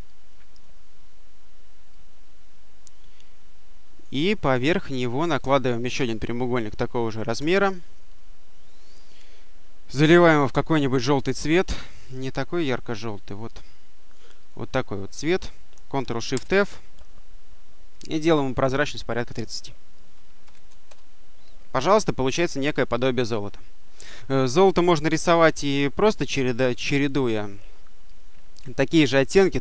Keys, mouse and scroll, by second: 1.8-4.3 drag, 5.2 click, 7.2 ctrl+d, 11.7-13.6 drag, 14.3 click, 16.2 ctrl+shift+f, 18.6 click, 20.0 3, 20.3 0, 20.7 Return, 23.9 click, 25.7 click.